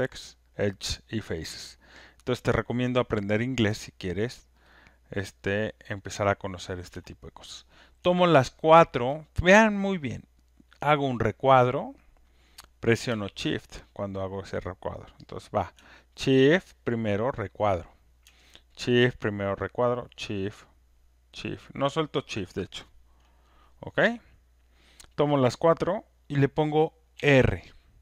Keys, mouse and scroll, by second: 1.9 right click, 5.5 click, 9.1 click, 10.2 click, 13.1 click, 13.8 click, 17.6 shift+click.